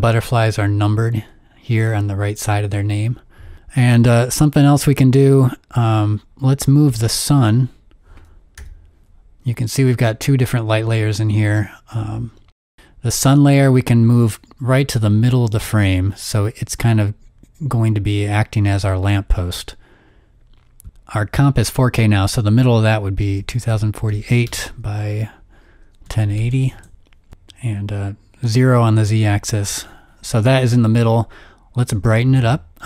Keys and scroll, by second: 8.6 p, 23.0-24.5 typing, 25.7-26.9 typing.